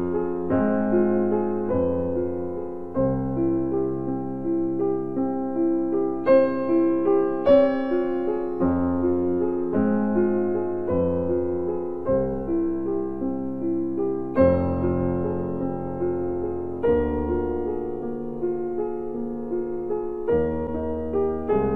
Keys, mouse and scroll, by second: 0.7 z, 6.4 click, 8.3 typing, 10.3 typing, 13.7 click.